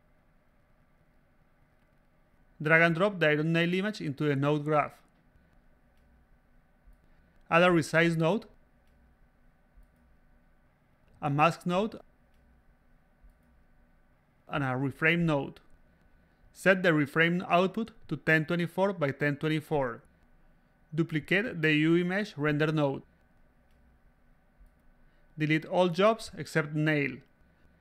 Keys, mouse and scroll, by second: 0.0 click, 0.8 click, 1.3 click, 3.7 click, 5.1-6.2 drag, 7.3 click, 8.6 click, 11.0 click, 12.2 click, 14.6 click, 15.7 click, 16.8 click, 17.0-18.8 typing, 19.9 a, 19.9 click, 20.4 s, 20.8-22.0 drag, 22.2 a, 22.4 click, 23.4-24.9 drag, 25.4 click, 27.1 click, 27.6 click.